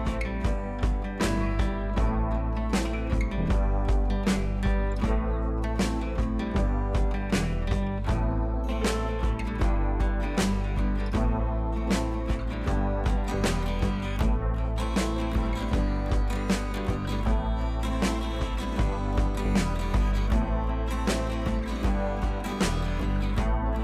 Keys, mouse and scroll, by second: 0.0 click, 0.9 ctrl+i, 1.4-2.5 typing, 3.1 click, 8.0 scroll up 1, 8.1 [, 8.2 [, 8.3 [, 10.1 scroll down 1, 10.4 click, 10.8 ], 10.9 ], 11.0-11.3 drag, 18.2 scroll down 1, 20.4-21.8 drag, 22.6 ctrl+t, 23.1-23.7 drag.